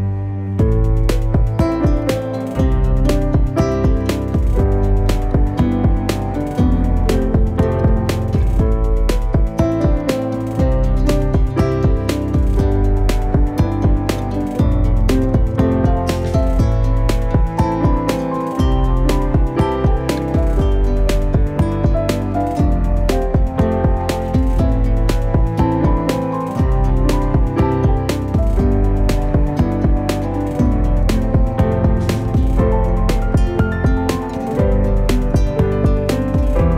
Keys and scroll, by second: 1.5 alt+space, 4.6 g, 15.1 ctrl+shift+z, 15.1 ctrl+shift+v, 26.3 v.